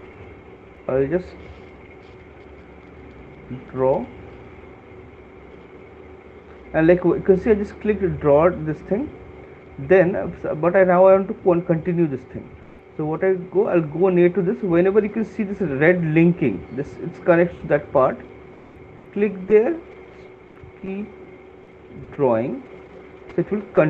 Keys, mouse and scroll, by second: 3.6 click, 5.8 right click, 9.6 right click, 11.4 click, 12.9 click, 22.3 click.